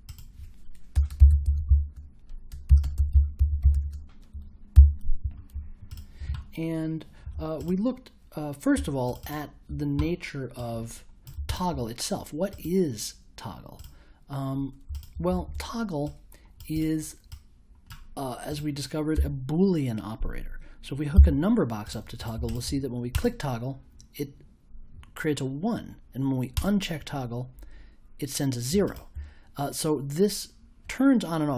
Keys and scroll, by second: 0.9-4.2 typing, 4.7 super+j, 15.3 super+a, 19.1 BackSpace, 21.1 i.